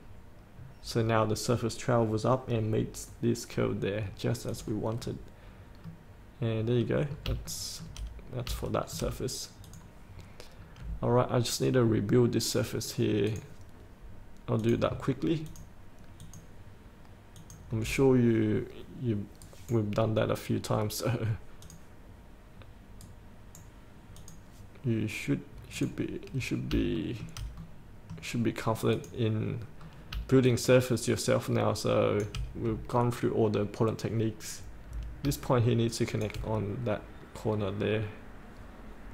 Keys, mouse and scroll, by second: 4.6 click, 5.1 scroll up 1, 6.5 middle click, 7.2 scroll down 1, 7.6 shift+middle click, 8.4 scroll down 1, 8.8 shift+middle click, 9.8 click, 10.4-10.7 scroll up 1, 10.7-12.4 scroll down 1, 13.4 click, 15.6 ctrl+click, 16.3 ctrl+click, 17.5 ctrl+click, 19.5 right click, 21.7 click, 23.1 right click, 24.3 click, 26.5-26.9 scroll up 1, 27.1 shift+middle click, 27.7-29.1 middle drag, 29.1 click, 29.9 scroll down 1, 30.6-32.4 shift+drag, 33.0-36.4 drag, 37.1-38.0 scroll up 1, 38.0-39.1 scroll down 1.